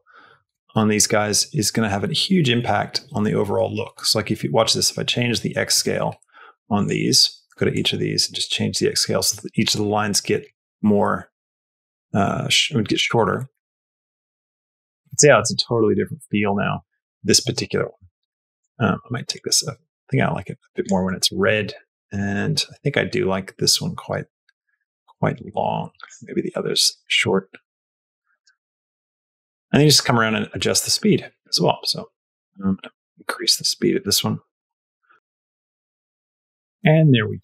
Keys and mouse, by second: 0.6-5.6 shift+drag, 7.6-10.3 shift+drag, 11.4 click, 13.2 middle click, 17.3 space, 20.9 click, 21.2 middle click, 21.9 middle click, 22.9-25.9 shift+drag, 26.4 middle click, 26.7 middle click, 27.3 space, 28.2 space, 29.7 middle click, 30.4-35.0 drag, 34.7 space.